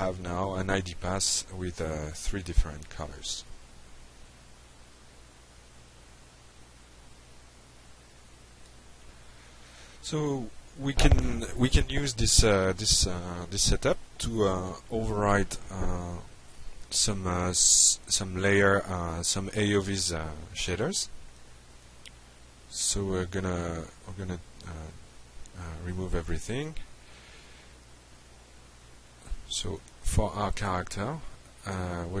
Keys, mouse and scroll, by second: 0.7-1.4 alt+middle drag, 3.0 click, 18.5-19.8 drag, 21.0 Delete, 22.3 click, 22.9 Delete, 23.9 drag, 24.6 drag, 25.3 click, 26.4 click, 28.2 click, 30.0 click, 31.5-32.2 typing.